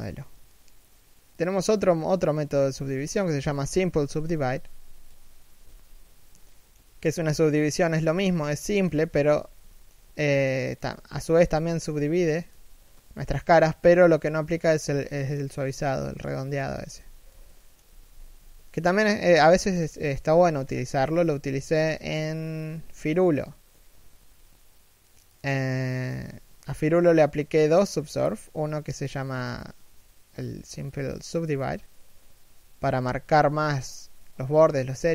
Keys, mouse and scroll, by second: 5.3 z, 6.1 shift+middle click, 8.1 shift+middle click, 8.4 scroll up 1, 8.7 z, 9.4 shift+middle click, 10.1 middle click, 10.5 z, 10.7 middle click, 11.5 1, 12.2 z, 14.5 scroll down 1, 14.8 shift+middle click, 16.4 z, 17.2 shift+middle click, 17.5 z, 19.2 shift+middle click, 19.7 scroll down 1, 19.9 shift+middle click, 20.3-20.8 scroll up 1, 20.8 shift+middle click.